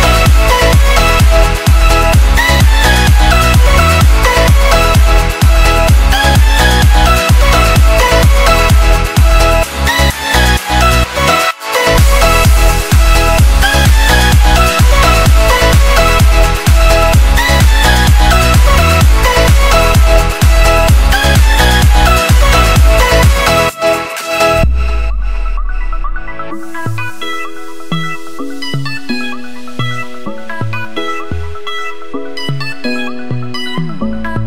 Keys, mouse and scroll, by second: 0.7 click, 2.9 ctrl+t, 3.8 click, 9.4 click, 11.0 Return, 19.1 click, 27.5 click.